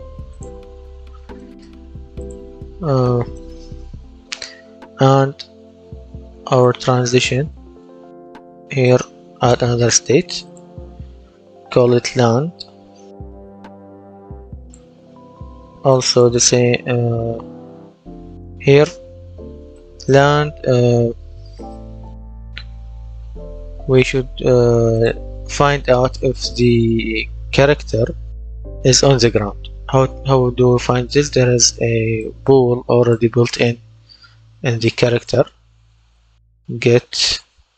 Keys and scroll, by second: 12.4-14.4 typing, 35.6-37.7 typing.